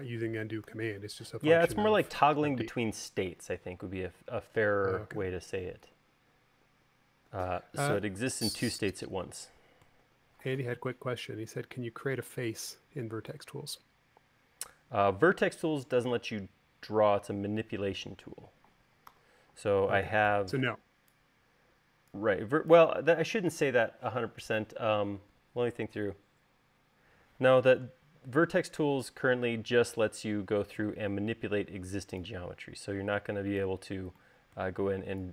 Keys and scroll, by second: 1.4-2.4 typing, 6.2-7.4 typing, 10.8 u, 19.9 v.